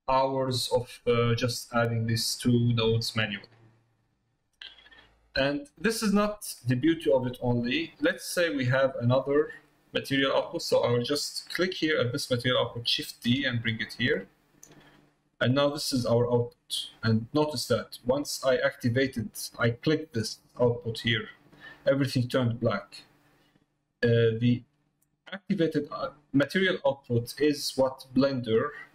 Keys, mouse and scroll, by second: 0.7 middle click, 5.6 middle click, 6.7 middle click, 7.7 middle click, 10.4 click, 14.8 click, 15.5 click, 17.2 middle click, 19.3 click, 21.6 middle click, 24.9 click, 27.7 middle click.